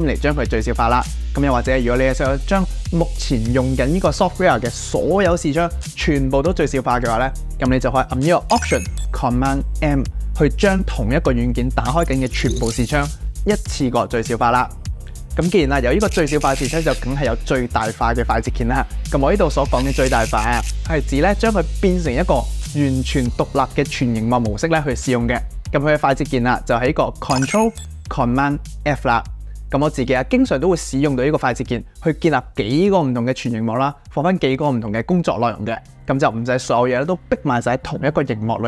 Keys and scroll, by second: 9.0 alt+super+m, 27.0 ctrl+super+f, 27.6 ctrl+super+f.